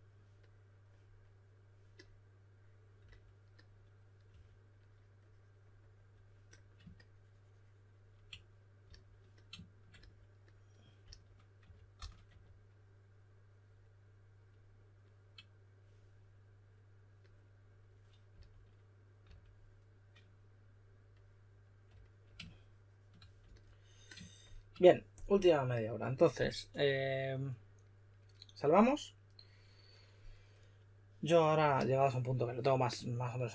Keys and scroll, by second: 4.2 3, 8.8 s, 11.0-12.7 typing, 18.2-19.2 typing, 33.2-33.5 typing.